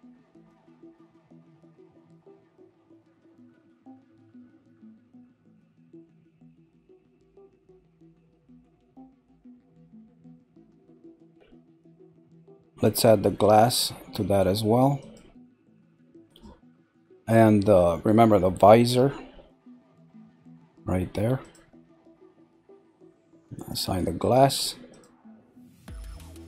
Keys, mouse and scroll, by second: 0.8 shift+click, 1.3 shift+click, 1.9 shift+click, 2.3 shift+click, 2.8-3.9 middle drag, 3.9 shift+click, 4.4 shift+click, 5.0 shift+click, 5.4 shift+click, 6.0 shift+click, 6.5 shift+click, 11.3 middle click, 11.8 scroll down 4, 13.4 click, 14.9 click, 15.7 click, 16.9 scroll up 2, 17.8 shift+middle click, 18.3 scroll up 5, 19.1-21.4 shift+middle drag, 21.4 click, 23.7 click, 24.9 click, 25.6 scroll down 2.